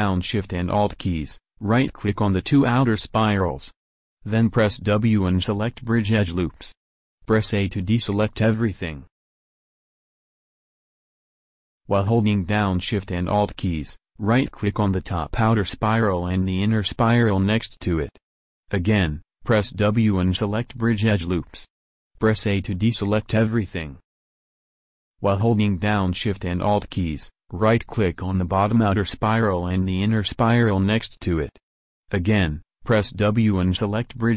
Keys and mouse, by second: 1.1-4.5 right drag, 4.5 w, 8.6 a, 12.7-20.9 drag, 20.9 w, 23.1 a.